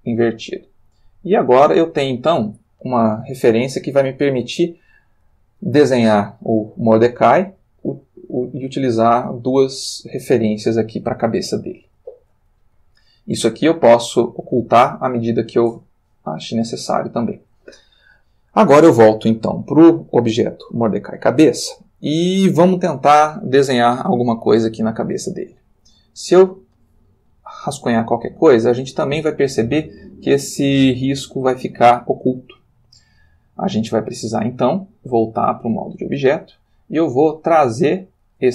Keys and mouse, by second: 1.8 click, 3.4 ctrl+middle click, 8.5 g, 9.6 click, 11.3 ctrl+middle click, 14.5 click, 15.4 click, 16.2 click, 16.7 click, 20.4 click, 23.6 click, 25.3 click, 26.8 click, 35.6 click, 36.2 click, 36.9-38.4 middle drag.